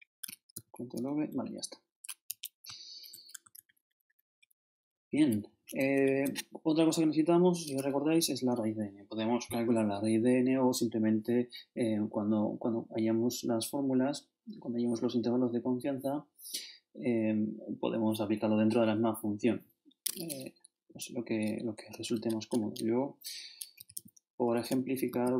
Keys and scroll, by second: 0.2 shift+super+Left, 0.5 shift+super+v, 1.3 shift+super+Down, 2.3 shift+Home, 3.5 shift+super+Up, 4.4 shift+super+Up, 4.7 shift+super+Down, 6.0 shift+super+Down, 6.0 shift+super+Left, 22.1 shift+0, 22.5 shift+Delete, 23.8-25.3 typing.